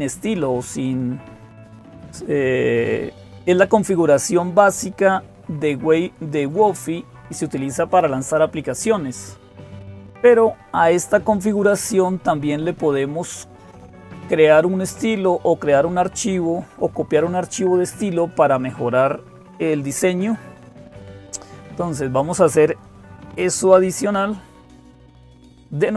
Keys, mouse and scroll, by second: 0.0-25.9 typing.